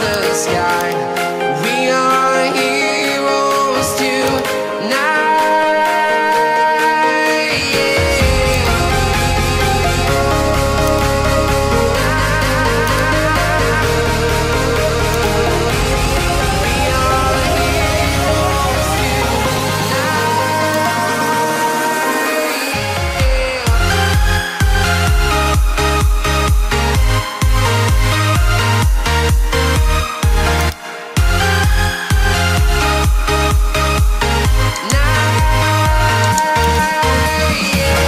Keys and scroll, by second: 32.5 ctrl+d.